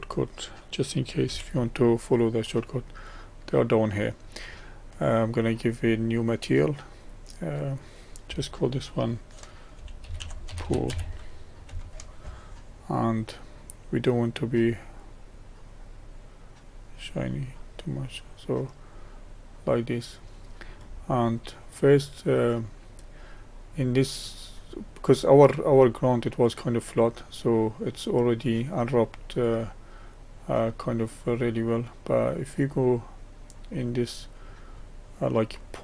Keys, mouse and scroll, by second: 1.3 n, 6.3-10.6 drag, 10.6 o, 15.0-18.1 drag, 18.9-25.7 middle drag, 25.7-26.6 scroll down 3, 27.3-28.4 middle drag, 28.4-28.8 scroll up 3, 29.3-32.6 middle drag, 32.6 click, 33.7 middle click, 34.7-35.5 scroll up 5, 35.5-35.8 scroll down 1.